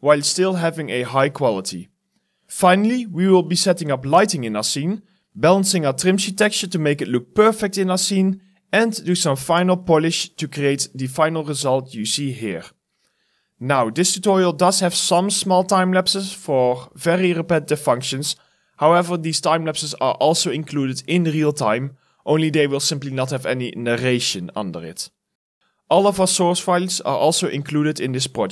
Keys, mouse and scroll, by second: 1.0 alt+click, 1.2 alt+middle click, 1.8 Return, 2.3-4.9 typing, 3.2 right click, 4.5 right click.